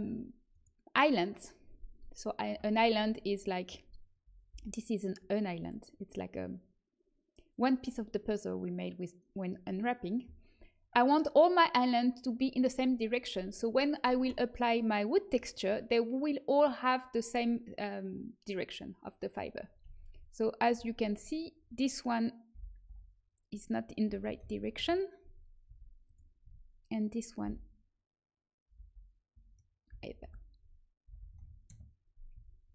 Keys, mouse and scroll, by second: 0.4-4.1 right drag, 4.4 l, 19.8 a, 20.0 a, 20.7 a, 20.9 a, 22.4 m, 22.8 l, 24.0 r, 25.6 g, 26.3 a, 27.4 l, 28.7 l, 30.0 shift+click, 31.0 r, 32.3 g.